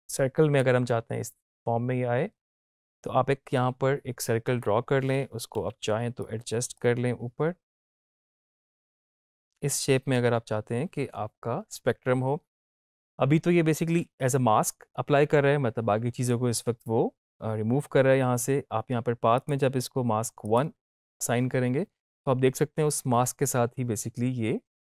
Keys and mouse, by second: 5.6 v, 6.2-14.0 drag.